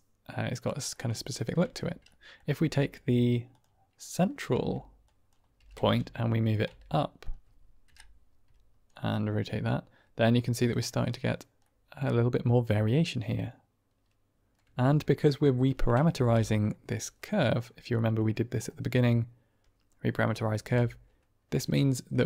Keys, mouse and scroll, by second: 0.8 shift+middle drag, 1.2 middle drag, 1.6 Tab, 2.1 middle click, 2.5 Tab, 3.4 click, 4.4 Tab, 5.0 click, 5.5 g, 5.7 z, 6.3 click, 6.6 Tab, 6.9-7.2 middle drag, 8.1 Right, 8.8-10.7 middle drag, 11.6-14.4 middle drag, 14.5 Tab, 16.0 ctrl+space, 16.6 middle click, 17.4 middle click, 17.9 click, 20.5 ctrl+space, 21.5 click.